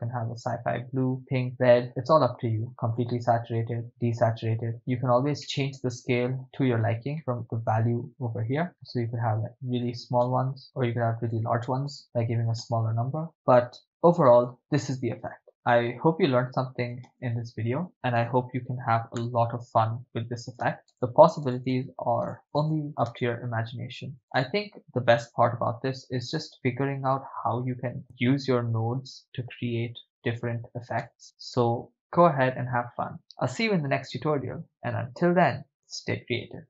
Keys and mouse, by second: 5.4-6.7 middle drag, 7.7-9.9 drag, 10.3 shift+space, 10.6 shift+space, 11.2 click, 12.7 shift+space, 17.2 shift+space, 17.7-19.7 drag, 20.2-23.3 typing, 24.3 shift+space, 24.5 shift+space, 26.4 shift+space, 28.0-31.0 drag, 31.1 shift+space.